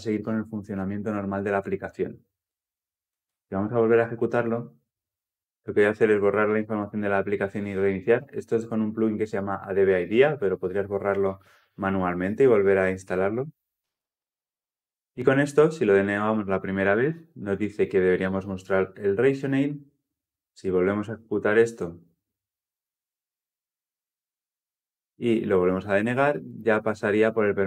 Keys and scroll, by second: 3.1 shift+F10, 20.9 shift+F10.